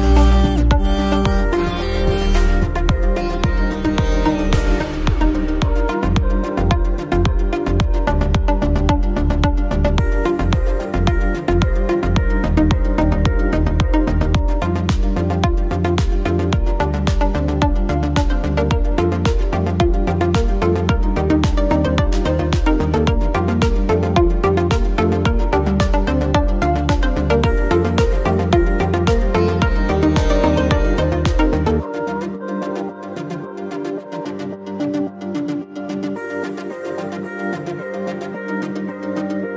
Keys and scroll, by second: 3.0 Caps_Lock, 3.4-6.4 typing, 8.4 ctrl+t, 17.4 Return, 17.8-19.4 typing, 20.3 Caps_Lock, 20.5-23.7 typing, 25.5-27.3 typing, 29.0-31.0 typing, 34.4-35.9 typing.